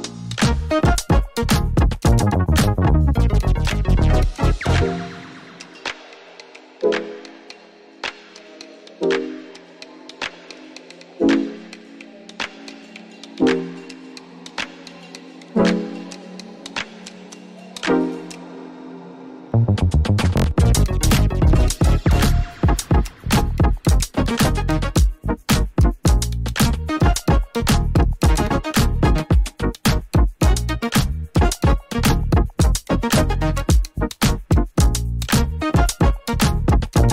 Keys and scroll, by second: 37.0 ctrl+z.